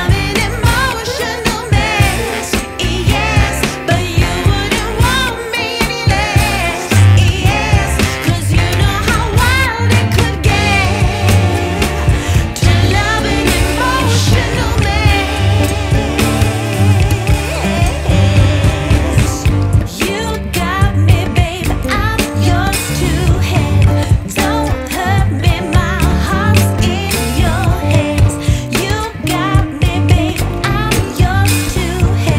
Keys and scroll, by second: 2.8 space, 5.2 Escape, 6.9 shift+Page_Up, 14.6 F2, 18.8 F3, 24.7 F2, 26.7 Escape, 31.5 space.